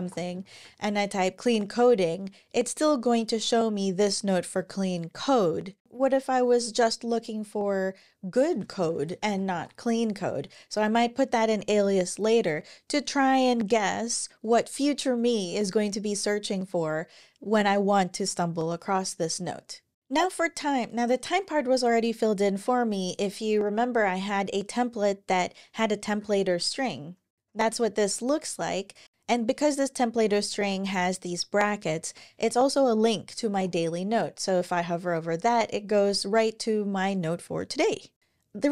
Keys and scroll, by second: 0.0-1.0 typing, 8.0-9.8 typing, 10.5 Down, 25.9 super+o, 29.9 super+Left, 30.2 alt+Right, 30.4 alt+Right, 31.7 Up, 33.3 super+w.